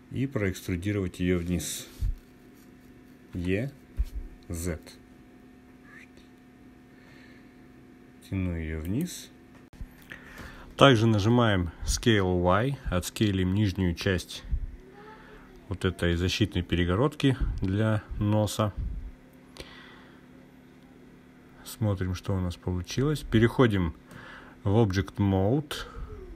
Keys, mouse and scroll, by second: 2.8 e, 4.0 z, 8.4 click, 12.6 s, 13.2 y, 17.8 click, 19.3 /, 21.6 click, 26.2-26.3 drag.